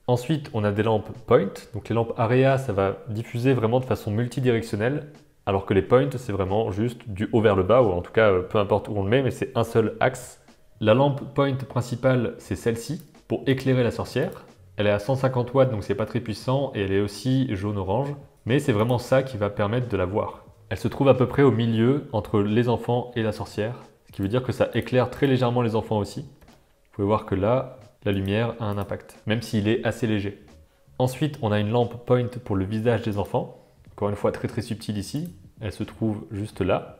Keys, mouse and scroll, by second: 12.8 click, 13.4 click, 14.2 click, 18.7 click, 24.1 click, 24.7 click, 25.1 click, 26.4-26.9 shift+middle drag, 28.1 click, 28.7 click, 29.2 click, 29.7 click, 33.1 click, 35.1 click.